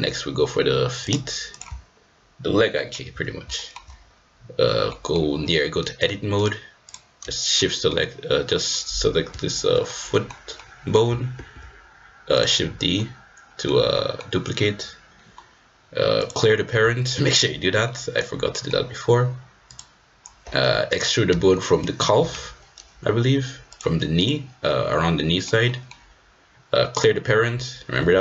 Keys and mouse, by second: 1.1 click, 2.7 shift+middle click, 3.5 shift+middle click, 4.9 middle click, 6.3 click, 6.9 click, 7.6 middle click, 8.6 click, 9.8 middle click, 10.7 middle click, 11.5 shift+d, 12.9 middle click, 13.9 middle click, 17.1 shift+middle click, 17.8 middle click, 18.5 middle click, 21.3 e, 24.7 middle click, 25.7 middle click, 26.9 click, 27.9 g.